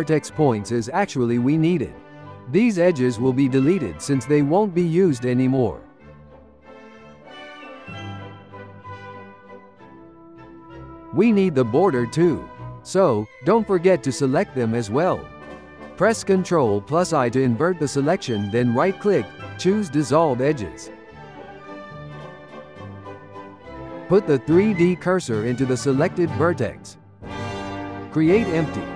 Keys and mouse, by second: 7.2 alt+shift+click, 8.1 alt+shift+click, 9.2 alt+shift+click, 9.9 alt+shift+click, 10.8 alt+shift+click, 13.2 alt+shift+click, 14.0 alt+shift+click, 14.9 alt+shift+click, 15.8 alt+shift+click, 17.4 ctrl+i, 18.2 x, 21.6 Tab, 22.0 Tab, 23.0 1, 23.4 click, 24.4 shift+s, 25.7 shift+s, 27.2 Tab, 27.7 shift+a.